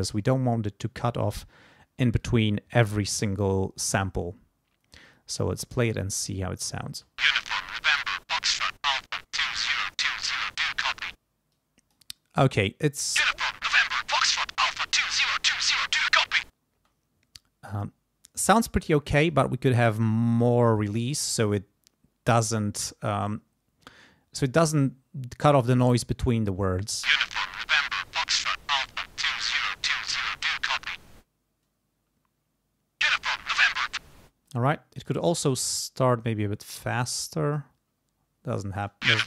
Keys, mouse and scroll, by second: 2.2-4.2 drag, 5.1-6.5 drag, 6.9 space, 10.0 click, 11.5 click, 16.7 space, 19.3-21.0 drag, 24.4 click, 24.9 scroll up 1, 25.0 click, 26.8 space, 34.0 space, 34.4 click, 34.5-35.2 scroll up 1, 36.0-37.5 scroll up 1, 37.5 scroll up 1, 38.7 space.